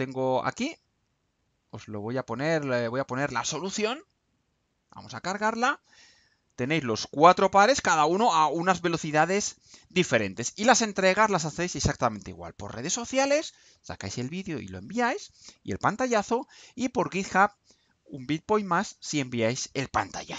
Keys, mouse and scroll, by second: 0.5 click, 1.3 click, 2.3 click, 4.2 click.